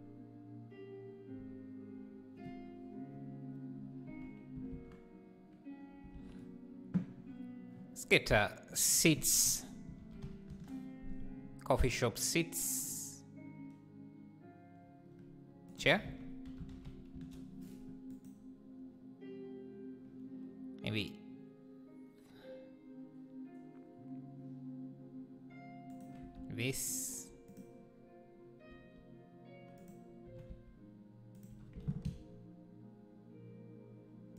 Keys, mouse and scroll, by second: 10.6-26.0 drag, 26.9-28.1 shift+right drag, 28.1-28.6 drag, 28.6 s, 30.2 r, 31.5 g.